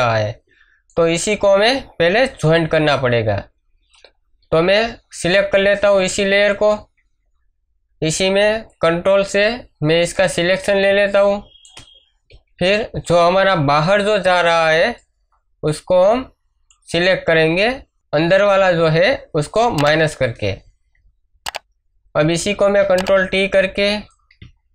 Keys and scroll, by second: 0.4 space, 2.6 ctrl+d, 10.8 space, 12.3 m, 22.8 ctrl+t.